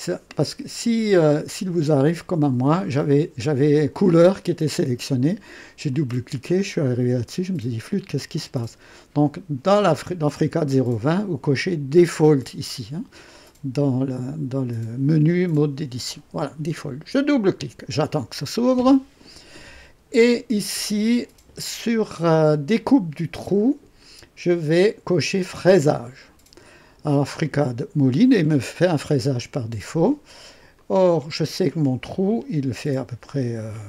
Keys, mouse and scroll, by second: 2.9 click, 4.2 click, 5.8 click, 7.8 click, 9.6 click, 13.3 click, 17.2 click, 20.4-20.8 scroll down 2, 23.9-25.7 drag, 30.7 click.